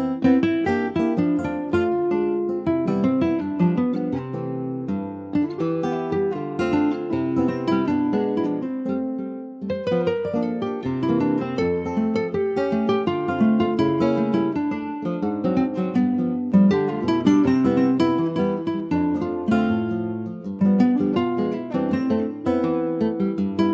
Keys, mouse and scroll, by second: 0.1 3, 0.4 click, 1.0-3.2 middle drag, 3.2 click, 4.0 ctrl+z, 5.1 click, 6.0 2, 6.2 click, 7.0 click, 9.7 click, 10.9 3, 11.0 click, 12.7 s, 21.8 e.